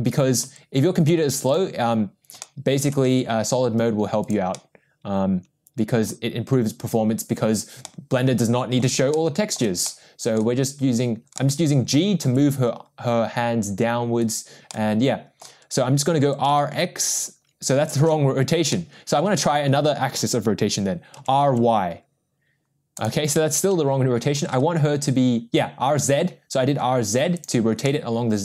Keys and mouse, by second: 1.5 g, 2.4-2.9 shift+middle drag, 3.1 g, 4.5-6.0 middle drag, 7.8-8.8 middle drag, 9.1-9.5 shift+middle drag, 9.8-10.3 middle drag, 11.3-11.9 middle drag, 12.5 g, 14.7 middle click, 16.4 r, 18.3 ctrl+z, 18.7-19.1 middle drag, 21.5 r, 23.7 ctrl+z, 24.5 r, 27.8-28.4 middle drag.